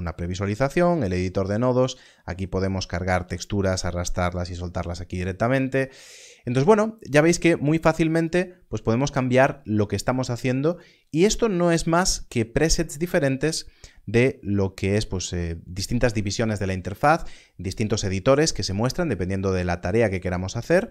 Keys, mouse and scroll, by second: 8.2 click, 10.6 click.